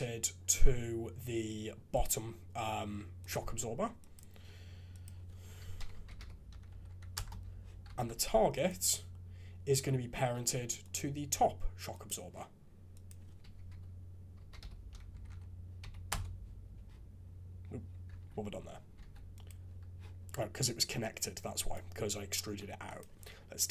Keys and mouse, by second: 1.9 click, 3.2 click, 5.1-7.1 drag, 6.8 Down, 7.9 alt+a, 8.5 click, 13.1-16.1 drag, 15.3 Down, 18.1 ctrl+z, 19.0 alt+a, 19.3 click, 21.6 click, 23.0-23.7 drag.